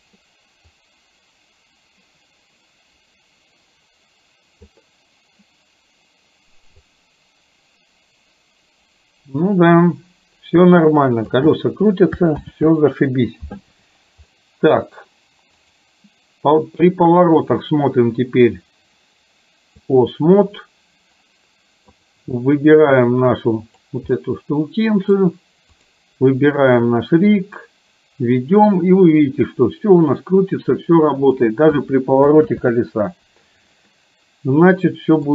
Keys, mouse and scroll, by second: 0.8-4.8 drag, 6.9-11.4 drag, 12.4 ctrl+z, 14.3 middle click, 15.7 click, 17.6-20.1 drag, 21.9 click, 23.1 click, 24.2-25.2 middle drag, 26.9-31.4 drag, 32.6 ctrl+z, 33.9-35.3 middle drag.